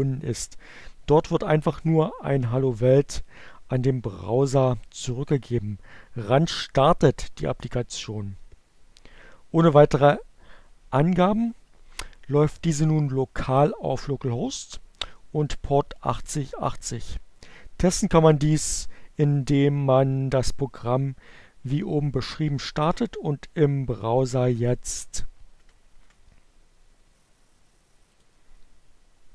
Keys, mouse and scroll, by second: 29.1 click.